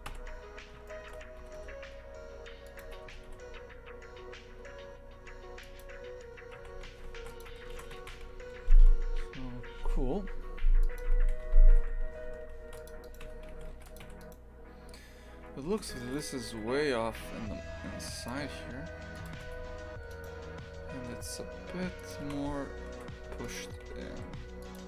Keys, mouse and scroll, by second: 0.1 KP_3, 0.9 shift+middle click, 1.4 g, 2.8 Tab, 3.1 g, 6.6 shift+f, 7.5 a, 8.0 shift+f, 11.1 shift+f, 13.0 right click, 13.2 Tab, 13.5 shift+f, 14.2 right click, 15.7 shift+f, 16.5 g, 18.4 Tab, 19.3 click, 19.4 Tab, 20.1 right click, 21.0 g, 22.2 shift+f, 23.7 g.